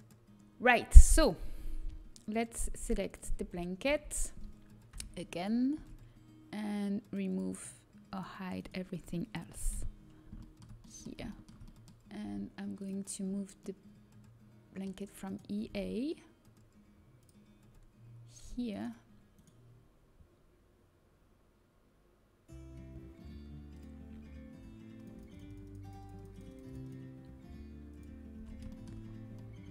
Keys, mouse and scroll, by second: 3.5 l, 3.8 l, 5.4 p, 6.0 Tab, 8.7 Tab, 10.3 h, 10.4-11.6 middle drag, 12.7-14.5 drag, 14.5 middle click, 15.2-16.9 right drag, 17.1-18.9 drag, 18.9 middle click, 19.8 right click, 23.6-28.9 drag, 28.6 Tab, 28.9-29.7 middle drag.